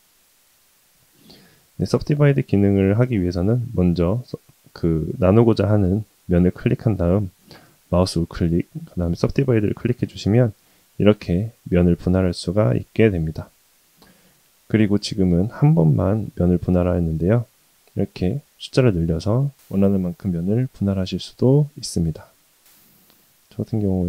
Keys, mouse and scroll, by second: 1.4 click, 3.8 click, 4.8 click, 7.9-9.3 right drag, 17.5 click, 18.1 click, 19.2 click, 20.1 click.